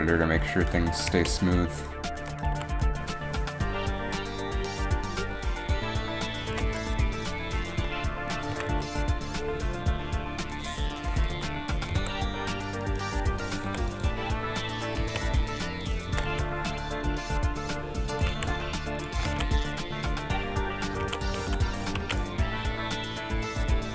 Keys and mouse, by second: 0.5 Left, 0.5 a, 0.5 KP_3, 1.3 a, 2.6 s, 2.6 a, 2.6 s, 6.6 g, 8.7 g, 11.4 g, 12.0 g, 13.7 i, 14.2 i, 15.1 a, 16.2 g, 19.2 a, 21.2 alt+a, 21.5 alt+a, 22.3 alt+a, 22.7 alt+a.